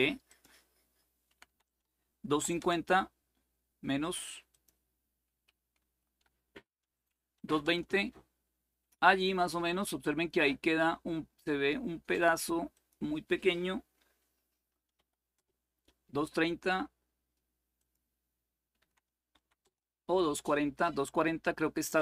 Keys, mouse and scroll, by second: 0.0-1.0 drag, 1.0 Delete, 1.2 Delete, 1.6 2, 2.0 5, 2.3 Return, 4.2 click, 5.5 Right, 6.2 Delete, 6.9-7.6 typing, 12.5 click, 14.3 Delete, 14.7 3, 15.1 Return, 17.5-18.5 drag, 18.5 Delete, 19.1 4, 19.4 Return.